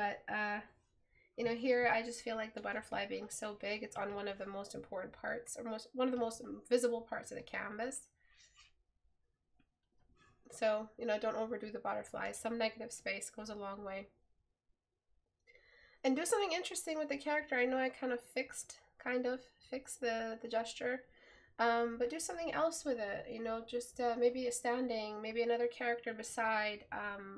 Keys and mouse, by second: 12.5 right click, 20.9 right click.